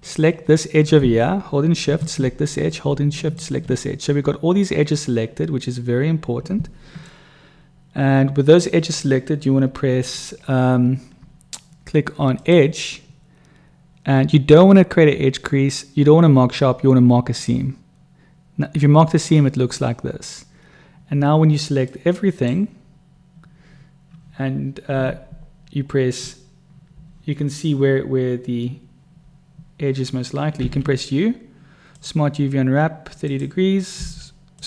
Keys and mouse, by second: 1.9 shift+click, 7.1-8.7 middle drag, 12.2-17.5 drag, 22.0 click, 30.6 u, 34.0 u.